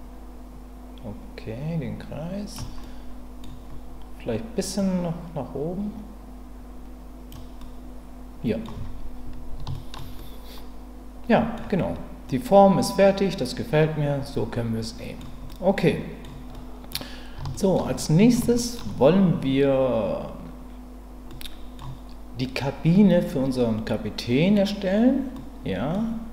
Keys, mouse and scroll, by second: 2.8 middle click, 4.8-7.3 drag, 7.6-8.6 middle drag, 8.7 Tab, 9.7 shift+middle drag, 10.2-11.5 middle drag, 12.3-15.2 middle drag, 15.5 middle click, 16.5-16.9 middle drag, 17.5 shift+middle click, 17.9-18.3 middle drag, 18.6 shift+middle click, 21.3-21.8 middle drag, 25.4-25.9 middle drag.